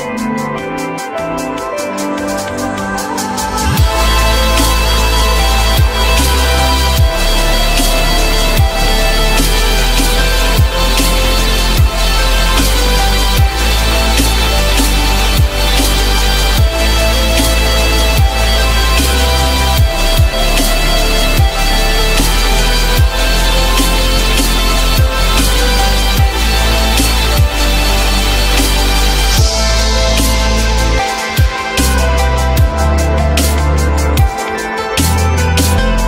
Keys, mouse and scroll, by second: 3.9 alt+middle click, 4.5 alt+middle click, 6.8 ctrl+click, 7.2 ctrl+click, 7.3 ctrl+double click, 8.0 alt+middle click, 9.2 u, 18.3 ctrl+click, 26.2 F3, 26.6 F3, 31.7 j, 32.9 alt+middle click.